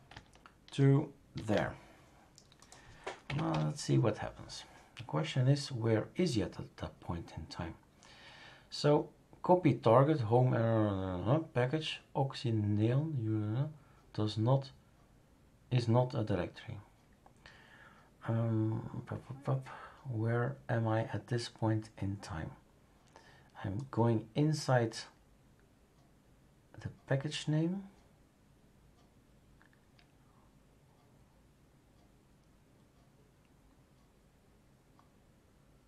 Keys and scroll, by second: 1.3 ctrl+s, 3.2 Up, 3.5 Return.